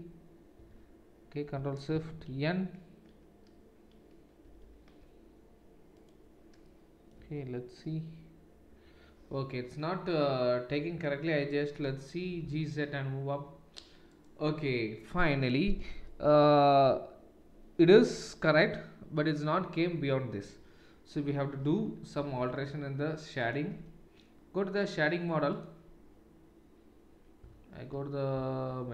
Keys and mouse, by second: 0.6 Tab, 4.5 ctrl+shift+n, 6.0 click, 6.7-25.6 middle drag, 7.2 Tab, 12.3 g, 25.7-28.9 middle drag, 27.4 z, 28.4 z.